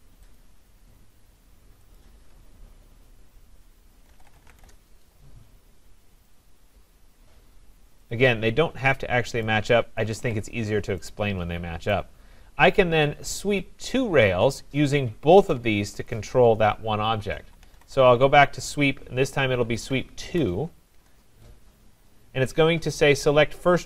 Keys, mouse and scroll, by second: 0.4 click, 2.0 shift+click, 2.8-3.1 scroll, 3.8-5.0 typing, 6.4 click, 7.2-7.9 typing, 8.1 click, 9.5 click, 10.1 Escape, 10.3 Escape, 10.5-11.0 scroll, 11.9 right click, 13.3-14.4 scroll down 4, 15.5 click, 16.1 click, 17.2-18.3 typing, 19.8 Down, 20.2 Down, 21.0 Return.